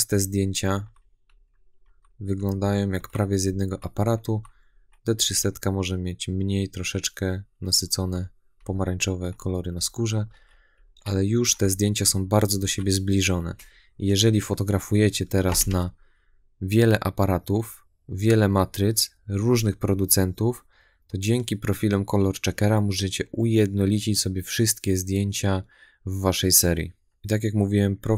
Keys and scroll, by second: 0.6 Left, 1.1 Right, 1.7 Left, 2.2 Right, 2.8 Left, 3.3 Right, 4.1 Left, 5.0 Right, 7.8 Left, 8.4 Right, 9.6 Right, 10.1 Left, 10.6 Right, 11.3 Left, 11.9 Right, 12.4 Left, 13.0 Right.